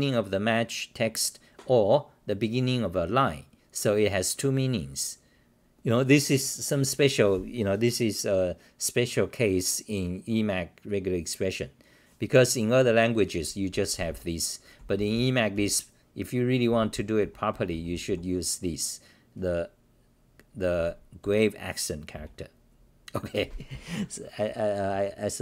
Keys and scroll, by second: 14.0-16.0 typing, 17.3-18.2 typing, 21.2 w, 22.1 w.